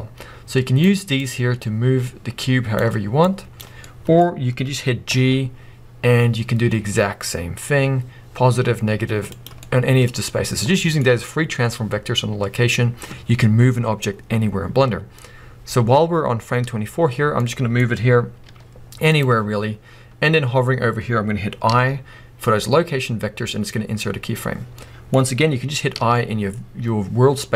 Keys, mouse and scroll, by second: 3.8-5.8 middle drag, 5.1 g, 9.4 click, 9.6 middle click, 10.9-19.2 middle drag, 18.4 g, 19.2 click, 24.8-27.5 middle drag.